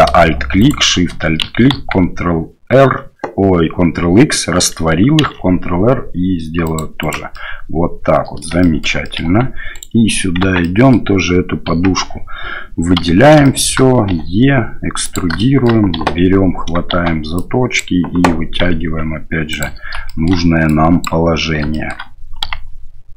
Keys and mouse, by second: 0.6 alt+shift+right click, 1.7 ctrl+x, 5.2 ctrl+r, 7.5-8.5 drag, 8.7 shift+click, 9.2 click, 9.3 Tab, 9.7 right click, 10.4 Tab, 10.6 click, 11.7 KP_3, 13.0 a, 13.4 shift+click, 14.1 e, 15.5 shift+middle click, 16.0 1, 16.9 shift+z, 17.5 click, 18.6 g, 20.1 shift+middle click, 20.8 click, 21.7 shift+middle click, 22.4 g.